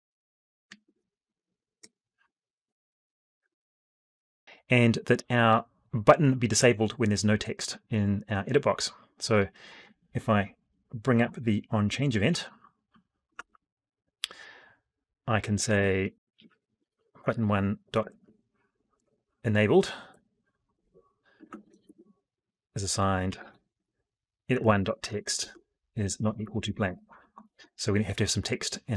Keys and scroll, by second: 3.6 F12.